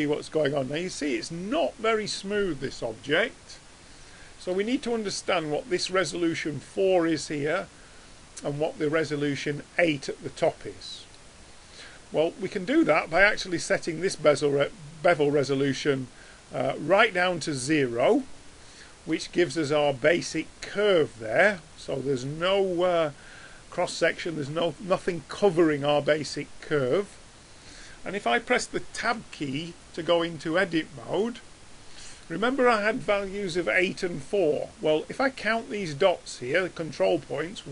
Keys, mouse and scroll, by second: 2.5-2.8 middle drag, 3.3 middle click, 4.0 middle click, 29.1 Tab, 35.8-37.5 drag.